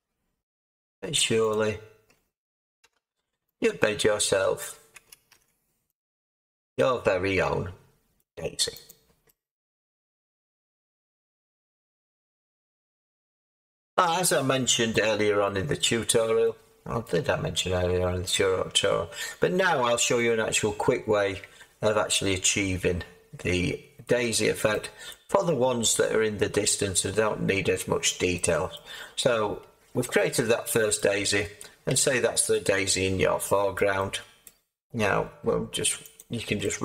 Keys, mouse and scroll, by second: 0.5 z, 2.8 Tab.